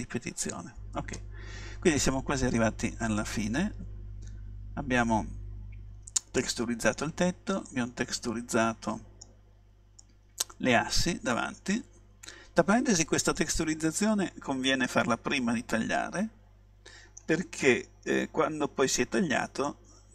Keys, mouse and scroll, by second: 0.6-2.5 drag, 2.5-5.2 middle drag, 7.8-12.0 middle drag, 13.4-15.1 middle drag, 19.7-20.1 middle drag.